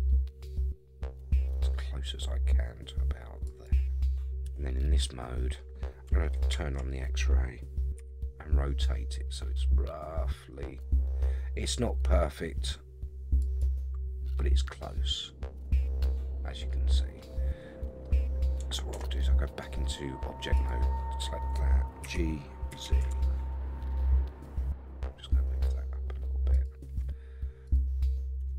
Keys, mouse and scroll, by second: 4.4 KP_3, 6.3 alt+z, 8.0 r, 14.1 scroll up 2, 18.9 Tab, 20.5 click, 22.0 g, 27.6 click, 28.4 Tab.